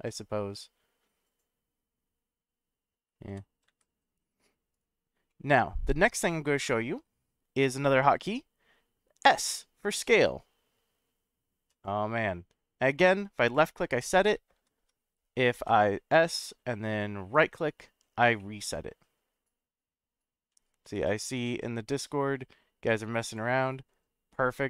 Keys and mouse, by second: 3.3 g, 3.7 x, 4.7 right click, 5.3-7.0 middle drag, 9.2 s, 13.5 click, 14.5 ctrl+z, 15.6 s, 17.3 right click, 18.4-20.5 middle drag.